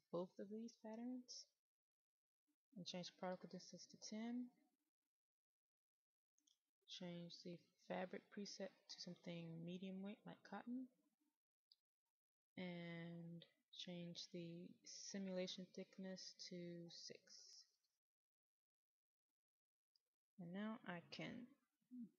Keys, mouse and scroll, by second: 20.7 KP_6.